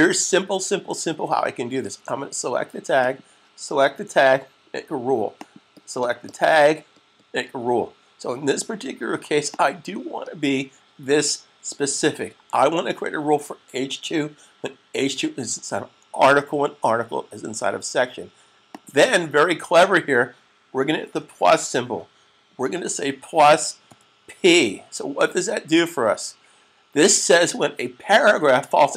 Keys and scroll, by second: 21.3 +, 23.8 p.